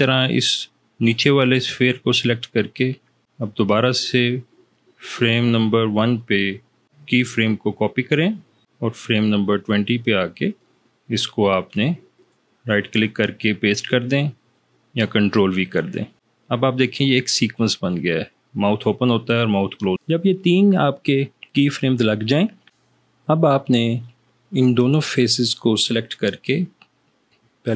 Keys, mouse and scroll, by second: 3.6 click, 7.4 right click, 10.6 click, 12.4 right click, 16.5-20.1 drag.